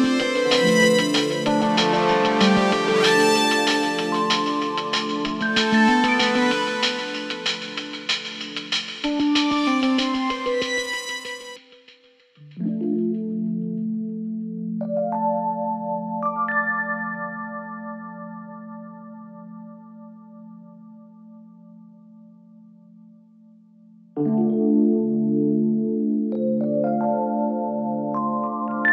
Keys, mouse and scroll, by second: 3.5-4.3 typing, 5.2-20.3 drag, 23.7 ctrl+t, 26.7-28.9 alt+drag.